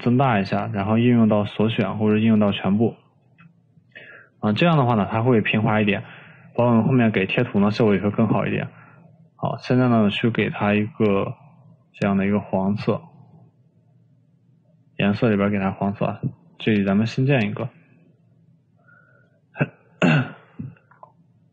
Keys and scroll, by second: 3.5 ctrl+z.